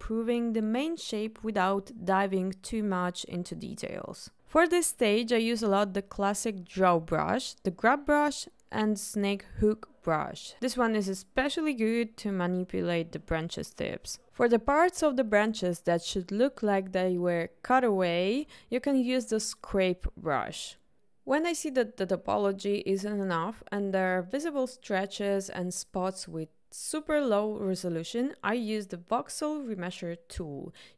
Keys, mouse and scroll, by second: 0.1 click, 0.5 middle click, 0.9 middle click, 1.2 KP_1, 1.8 click, 2.5 f, 2.6 ctrl+r, 2.6 shift+middle click, 2.8 click, 3.1 ctrl+shift+middle click, 4.3 click, 5.1 ctrl+middle click, 5.4 shift+middle click, 5.9 middle click, 6.2 click, 6.4 middle click, 6.5 click, 7.0 middle click, 7.6 shift+middle click, 7.7 click, 7.8 click, 8.0 ctrl+shift+middle click, 8.7 click, 9.1 middle click, 9.6 ctrl+z, 10.0 click, 11.6 click, 12.2 ctrl+middle click, 12.7 click, 13.2 click, 13.8 ctrl+z, 14.1 click, 14.6 shift+middle click, 16.1 click, 16.3 shift+middle click, 16.9 click, 17.5 middle click, 17.6 click, 18.1 click, 19.1 middle click, 19.5 click, 19.8 middle click, 20.4 click, 20.7 click, 21.0 ctrl+middle click, 21.7 click, 21.9 click, 22.5-24.4 drag, 24.8-27.3 drag, 28.3 ctrl+shift+z, 29.5 shift+r.